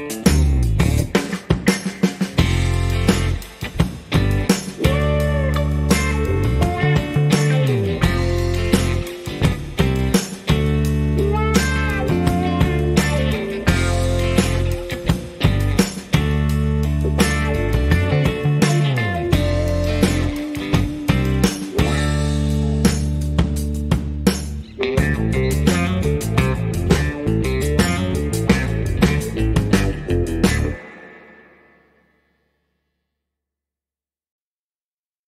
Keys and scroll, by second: 2.1 shift+a, 3.8 s, 6.6 s, 6.8 y, 10.3 g, 12.5 s, 12.6 x, 30.5 a, 31.0 a.